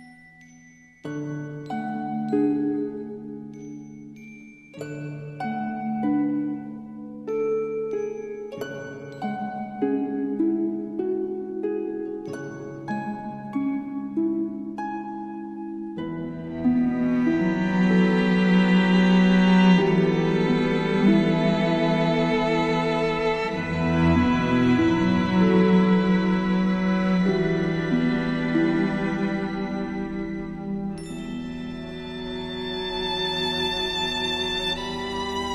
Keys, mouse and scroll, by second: 2.1 ctrl+click, 3.0-3.5 alt+scroll up 2, 3.5 space, 3.5 click, 3.6 click, 4.4-5.4 scroll up 2, 5.4-9.3 drag, 9.6 space, 9.8 click, 10.0 space, 11.9-14.4 drag, 18.5 space, 18.6 click, 21.6 click, 28.5 click, 30.0 click.